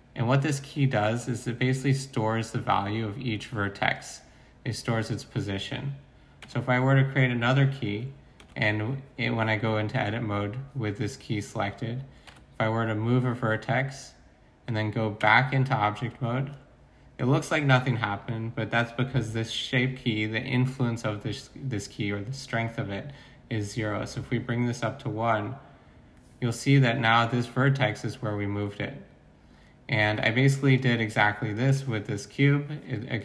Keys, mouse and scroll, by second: 1.2 Tab, 6.4 Tab, 8.4 Tab, 12.2 g, 15.2 Tab.